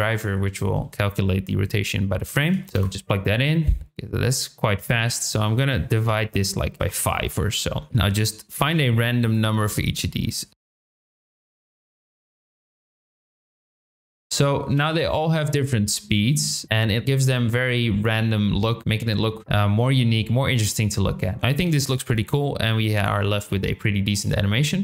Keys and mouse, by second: 2.7 space, 4.8-7.8 drag, 7.9 shift+middle click, 9.2-10.5 drag, 10.6 space, 10.7 click, 11.1 shift+middle click, 11.2 click, 12.2 shift+middle click, 12.4 shift+click, 13.2 shift+middle click, 13.5 shift+click, 14.7 space, 21.7 space.